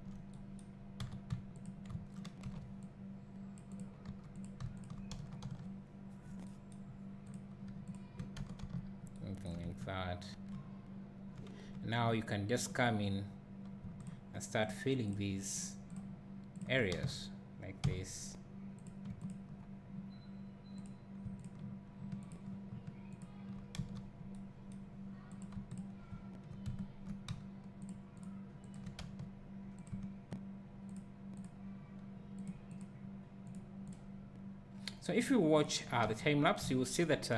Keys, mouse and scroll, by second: 1.0 w, 1.6 shift+click, 3.7 alt+m, 4.0 2, 4.4 click, 4.8 shift+click, 5.4 f, 7.3 click, 7.9 shift+click, 8.6 f, 9.9 `, 11.3 click, 12.8 click, 14.1 shift+click, 17.9 f, 18.9 click, 19.3 ctrl+click, 20.9 click, 21.4 shift+click, 23.8 f, 25.4 click, 25.8 shift+click, 26.7 `, 27.9 shift+click, 29.0 f, 29.9 click, 31.0 shift+click, 36.1 f, 36.7 `.